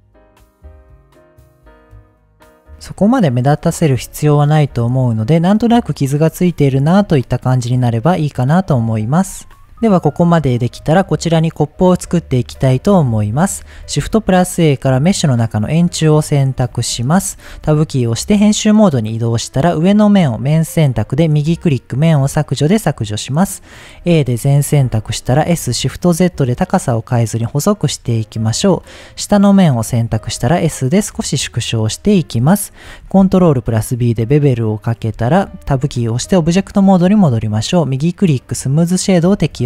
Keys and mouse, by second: 0.5 middle click, 0.8 click, 1.8 click, 3.0-3.4 middle drag, 4.5 shift+middle click, 6.9 click, 10.0-10.7 middle drag, 12.6-13.1 drag, 13.2 shift+middle click, 13.8 shift+a, 16.2 middle drag, 16.7 g, 16.8 z, 17.2 click, 17.5 Tab, 18.9 click, 19.6-21.5 drag, 22.2 middle click, 23.1 middle click, 24.0 a, 24.9 s, 25.6 shift+z, 27.9 click, 28.3 click, 29.6 middle click, 30.1 s, 31.7 click, 33.0 ctrl+b, 34.9 click, 35.7 Tab, 36.9 middle click, 37.8 click.